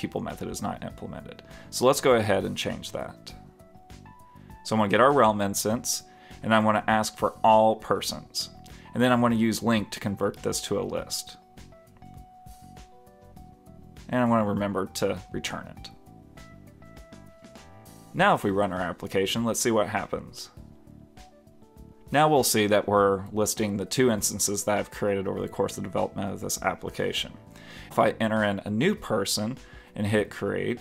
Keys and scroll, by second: 10.8 alt+Left, 11.6 alt+Return, 12.8 super+Left, 14.0 super+s, 16.1 super+Return.